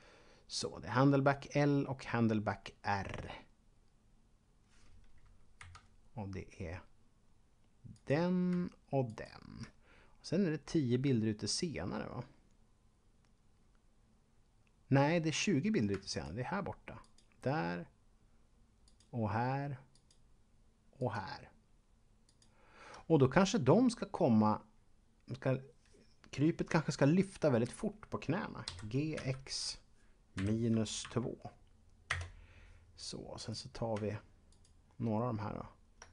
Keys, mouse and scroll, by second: 4.2-5.5 scroll up 1, 5.5 Left, 7.9 right click, 9.1 shift+right click, 16.0 shift+double right click, 17.0 shift+right click, 18.8 shift+right click, 21.0 shift+right click, 22.2 shift+right click, 28.5-31.5 typing, 32.0 Return, 33.3 right click, 34.5 shift+right click.